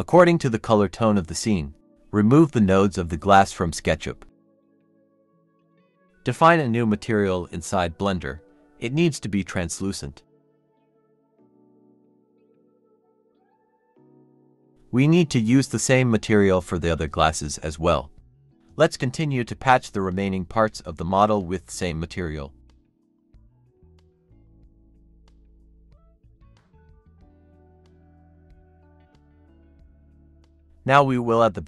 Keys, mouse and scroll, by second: 4.3 double click, 11.4 scroll up 1, 12.8 double click, 19.0 scroll up 1, 21.7 double click, 22.3 scroll down 1, 23.2 scroll up 1, 24.2 scroll down 1, 24.4 scroll up 1, 24.8 Tab, 25.2 scroll up 1, 27.1-28.1 typing, 28.0 Tab, 28.3 double click, 28.5 scroll down 1.